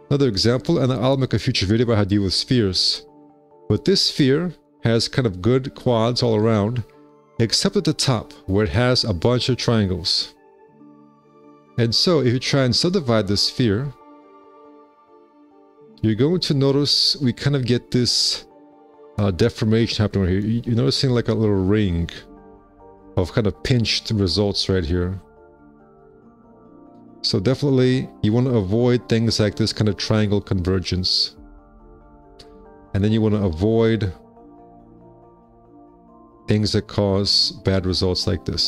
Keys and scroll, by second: 1.7 &, 3.4 w, 3.7 z, 9.9 F4, 10.4 q, 11.4 F4, 14.5 2, 15.0 F4, 22.5 F4, 25.5 space, 26.2 F4, 26.5 F4, 31.7 space, 32.3 F4, 32.8 F4, 35.4 `, 35.7 space, 36.2 4.